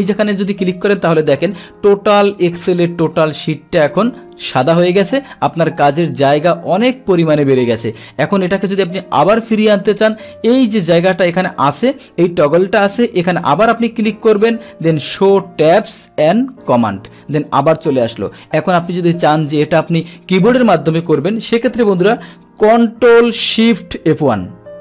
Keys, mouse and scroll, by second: 13.2 click, 16.6 click, 24.1 ctrl+shift+F1.